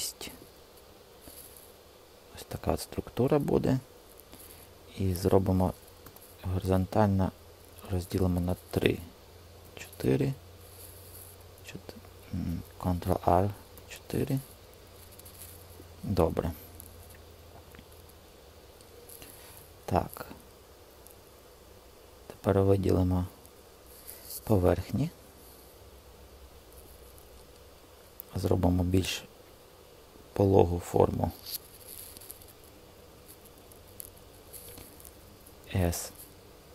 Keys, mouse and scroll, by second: 2.2 Escape, 4.7 click, 5.9 ctrl+r, 11.4 KP_4, 12.8 ctrl+r, 18.1 Escape, 35.5 s.